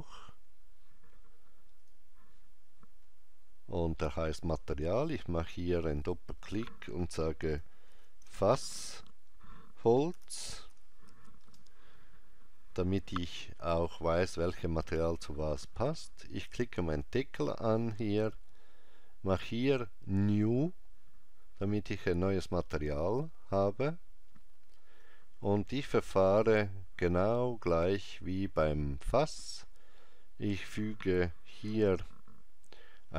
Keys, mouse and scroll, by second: 1.9 click, 5.0 click, 8.7 s, 17.0 click, 20.3 click, 25.1 click, 31.7 shift+a.